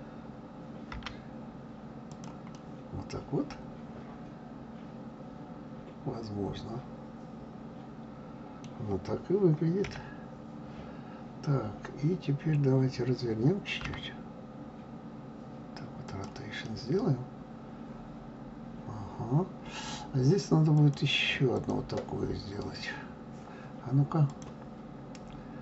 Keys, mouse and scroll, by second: 0.9 g, 2.5-5.6 middle drag, 9.8 KP_1, 13.8 r, 16.6-19.7 middle drag, 20.8 click, 21.6 click, 24.3-25.6 drag.